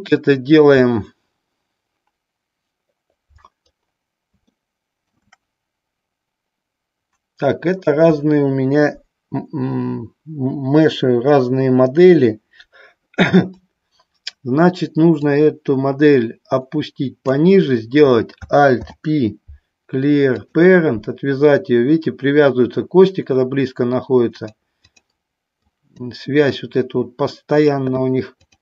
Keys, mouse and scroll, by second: 4.7 shift+middle click, 15.3-17.5 drag, 18.8 alt+p, 24.4 click, 25.8 click.